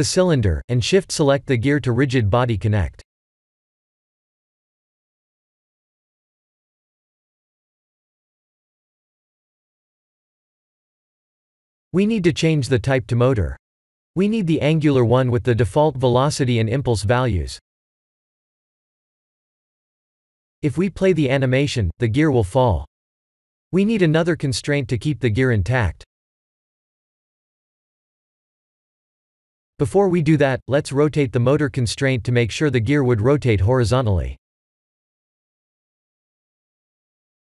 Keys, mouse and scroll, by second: 0.2 click, 1.3 click, 1.6 shift+click, 2.7 click, 8.3 click, 14.7 click, 19.2 click, 19.8 click, 22.7 click, 23.7 click, 24.4 click, 25.3-26.2 scroll down 5, 26.2-26.7 scroll down 3, 26.7 click, 28.2 click, 29.0 click, 31.5 KP_1, 32.4 r, 34.1 middle click, 35.5 middle click, 36.4 click.